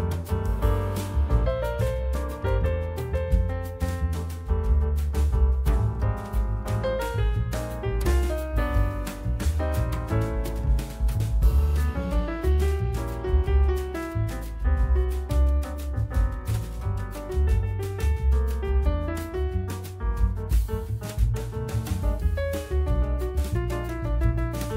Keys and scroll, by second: 4.5 F4, 5.3 1, 6.1 F3, 11.8 F3, 14.0 F3, 16.0 F3, 19.7 F3, 22.7 F3.